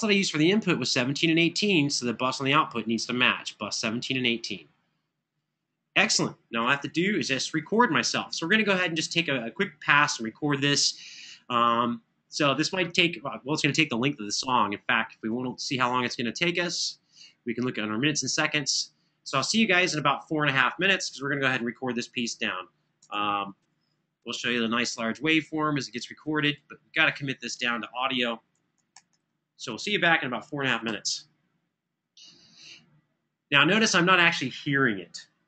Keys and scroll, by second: 6.6 super+=, 28.5 super+], 28.7 super+], 30.6 3.